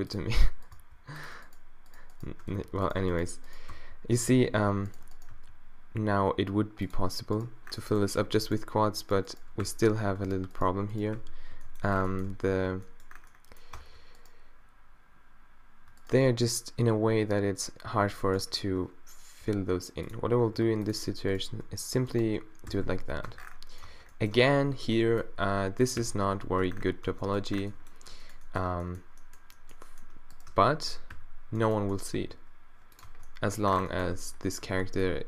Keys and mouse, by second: 0.2 click, 0.8 e, 2.6 f, 3.7 f, 4.5 a, 5.4 g, 7.9 middle click, 9.7 q, 11.2 q, 11.5 right click, 11.5 b, 12.3 a, 12.7 Tab, 13.8 Tab, 18.5 middle click, 19.4 e, 20.6 r, 21.3-22.6 drag, 22.7-23.1 f, 23.3 Tab, 23.5 middle click, 23.9 Tab, 24.3 Tab, 24.8 a, 25.0 b, 26.0 q, 26.5 q, 26.6 q, 27.1 Tab, 27.5 Tab, 28.7 Tab, 30.5 Tab, 30.9 Tab, 31.2 q, 32.2 g, 33.1 Tab, 34.2 Tab, 34.6 a, 34.8 b.